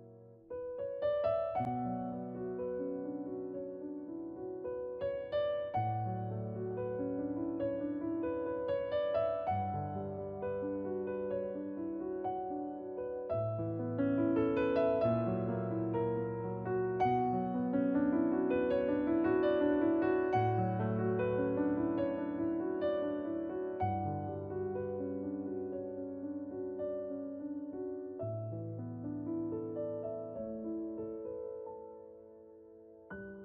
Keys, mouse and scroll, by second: 0.1 alt+click, 2.7-6.2 scroll up 1, 6.2 alt+click, 9.9 alt+right click, 10.9 shift+s, 12.0 click, 18.5 alt+click, 23.5 shift+2, 29.1 alt+click, 29.6 scroll down 1, 31.4 alt+click, 32.9 shift+r.